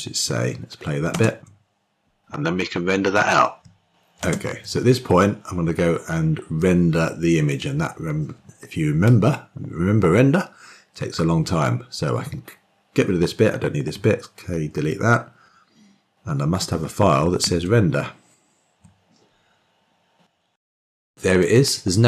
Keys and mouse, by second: 1.0 shift+space, 6.4-7.4 drag, 14.1 k, 14.6 Delete.